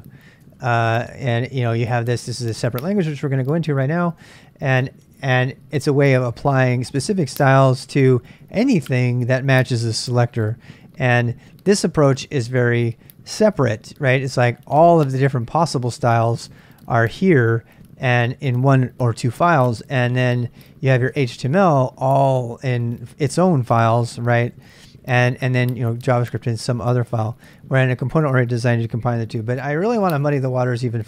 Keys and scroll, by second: 0.0-4.2 typing, 1.0 Return, 1.4 ctrl+[, 8.9-21.9 typing, 19.8 ctrl+[, 19.8 ctrl+j, 22.2 Return, 23.3-26.2 typing.